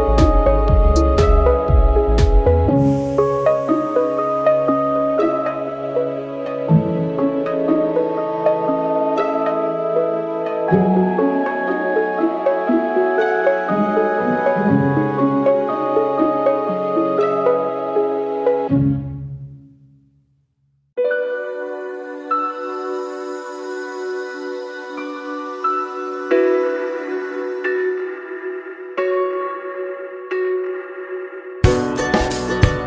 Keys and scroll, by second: 10.4 alt+z, 19.1 alt+z, 29.0 alt+z, 29.7 alt+z.